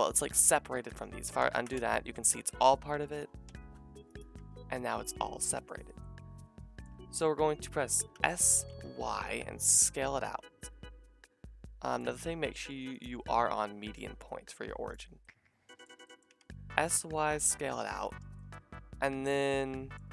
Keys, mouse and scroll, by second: 1.4 ctrl+z, 1.7 g, 3.5-12.0 drag, 3.5 e, 4.4 g, 8.1 s, 12.0-13.0 middle drag, 13.0-17.2 drag, 16.3 s, 17.2 shift+right click, 18.1-20.1 shift+middle drag.